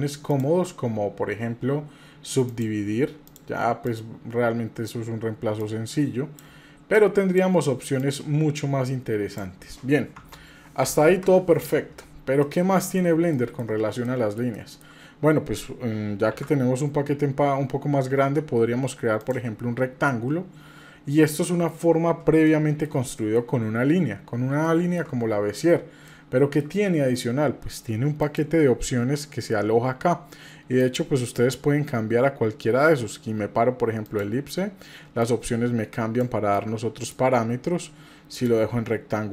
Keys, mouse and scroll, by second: 0.3-0.7 shift+drag, 2.5 click, 3.3 click, 3.8-4.9 drag, 5.6 click, 6.9 click, 8.0-9.4 drag, 10.2 Tab, 11.0 Delete, 11.8 scroll down 1, 12.4-13.0 middle drag, 13.3-13.7 shift+middle drag, 14.1-14.8 shift+middle drag, 16.3 shift+a, 19.7 scroll down 1, 20.1-21.5 middle drag, 22.5 shift+middle click, 23.0 middle click, 24.6 shift+middle click, 26.1 shift+middle click, 28.2 click, 30.8-34.2 drag, 35.2-36.2 drag, 36.5 click, 38.3-39.3 drag.